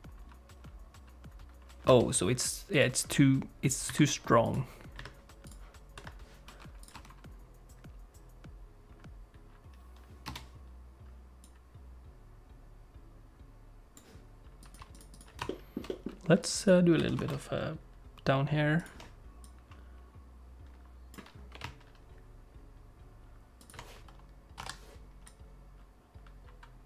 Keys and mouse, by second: 1.9 space, 2.7 click, 3.9 click, 4.4 click, 5.5 click, 6.0 click, 6.9 click, 7.0 space, 10.3 space, 11.5-13.5 drag, 14.6 click, 14.9 click, 15.1 click, 15.6 ctrl+middle click, 16.0 middle click, 16.4 click, 17.0 g, 19.5-21.2 drag, 21.5 g, 24.6 i, 25.3-26.8 drag.